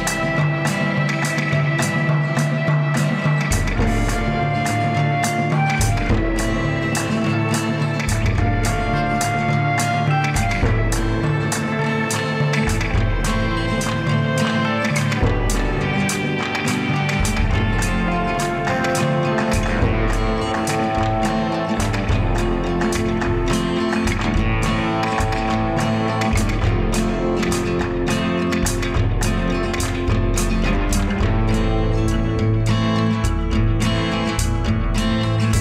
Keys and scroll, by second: 6.1 ctrl+z, 7.6 ctrl+z, 11.7 ctrl+z, 12.9 ctrl+z, 15.0 ctrl+z, 16.6 Delete, 22.8 Delete, 29.4 ctrl+z, 31.4 ctrl+z.